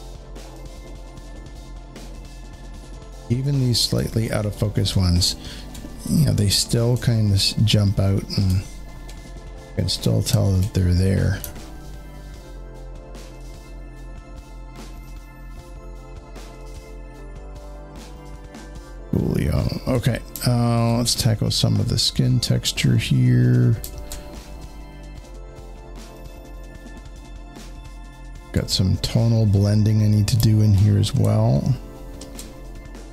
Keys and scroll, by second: 11.2 alt+space, 18.0 alt+space.